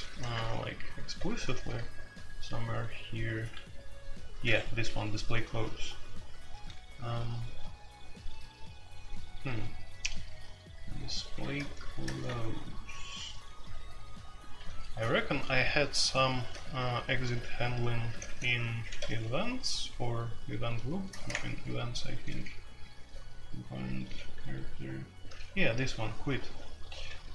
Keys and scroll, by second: 0.0 ctrl+p, 0.3 Return, 0.9-6.8 typing, 11.6 alt+n, 12.0 alt+n, 16.3 space, 18.1-19.1 typing, 21.1 ctrl+n, 21.3 Return, 22.2-27.3 typing.